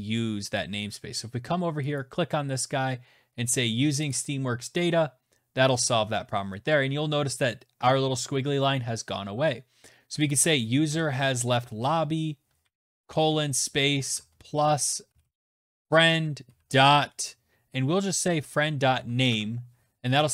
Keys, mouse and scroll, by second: 0.8 click, 2.9 click, 9.1 click, 9.7-11.4 typing, 11.7 Right, 13.6-14.7 typing, 17.3-18.2 typing, 18.8 Right.